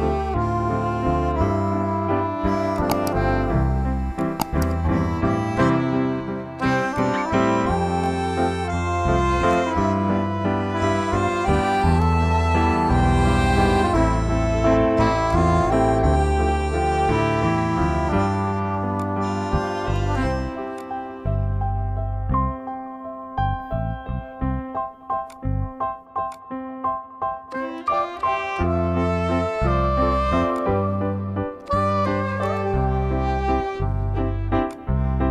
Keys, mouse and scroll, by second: 2.6-6.7 drag, 6.8-9.4 drag, 9.4 right click, 15.0 click, 18.8-30.4 drag, 30.4 right click, 32.2 click, 34.4-35.3 drag.